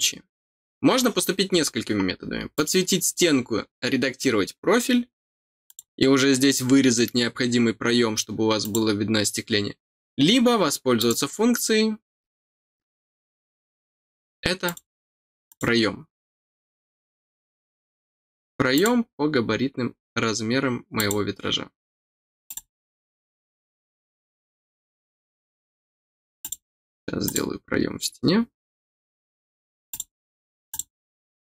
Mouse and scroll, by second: 2.5 click, 5.6 click, 8.6 click, 10.9 click, 12.7 scroll down 1, 14.6 click, 18.7 click, 20.9 click, 22.4 click, 26.3 click, 27.2 click, 29.8 click, 30.6 click.